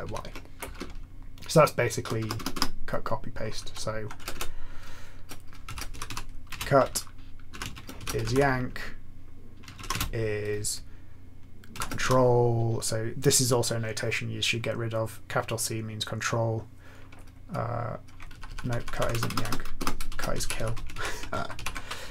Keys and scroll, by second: 0.2 ctrl+y, 0.7-2.0 BackSpace, 1.2 BackSpace, 2.2 BackSpace, 2.5 BackSpace, 3.6 Down, 4.1 Return, 4.3 Return, 5.3-9.9 typing, 11.7 typing, 18.3 Left, 18.4 Left, 18.6 Left, 18.7 Left, 18.9 Left, 19.1-21.0 typing, 21.5 Right.